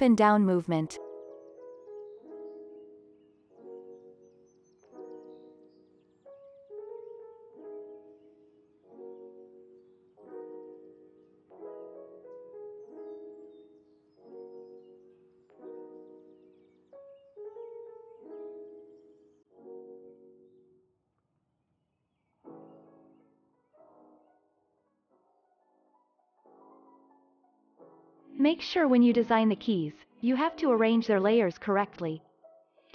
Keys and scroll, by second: 2.9 p, 4.6 alt+x, 6.8 alt+z, 10.6 z, 11.1 alt+x, 14.5 ctrl+s, 15.4 z, 16.6 Down, 30.9 ctrl+s.